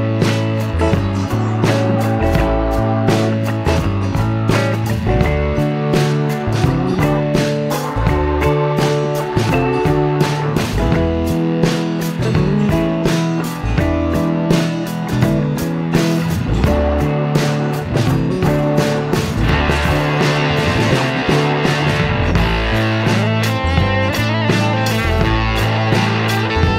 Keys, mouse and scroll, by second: 2.4 click, 2.6 space, 4.2-4.9 drag, 6.0-7.0 drag, 9.1 click, 10.2 click, 12.8 click, 14.3 click, 15.5 click, 16.5 click, 17.4 click, 17.5 space, 18.9 click, 19.0 space, 20.7 click, 22.4 click, 24.6 F1, 26.0 click.